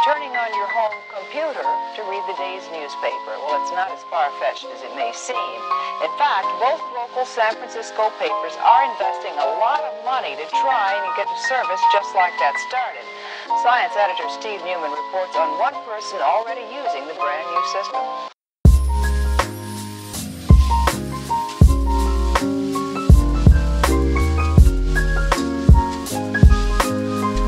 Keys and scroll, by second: 24.4 f.